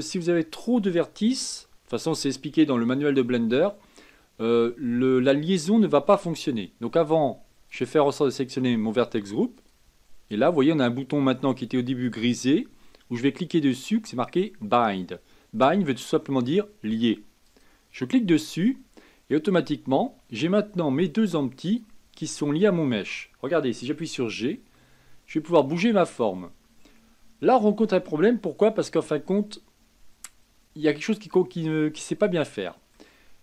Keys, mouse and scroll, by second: 7.7-10.7 drag, 17.4-20.5 drag, 21.6 click, 24.3 g, 29.3-32.3 middle drag.